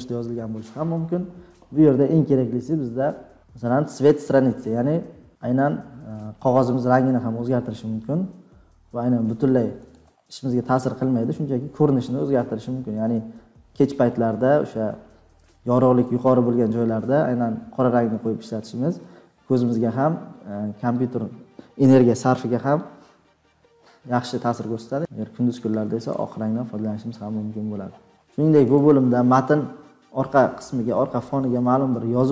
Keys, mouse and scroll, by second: 10.3 click, 16.1 scroll, 16.5-17.7 scroll down 10, 18.5-20.9 scroll down 22, 22.4 scroll down 3, 23.8-24.6 scroll down 8, 24.8 scroll, 25.0 scroll down 6, 25.7 click, 26.1 click, 26.6-27.5 scroll down 21, 27.5 scroll up 1, 27.5 scroll down 1, 27.6 scroll.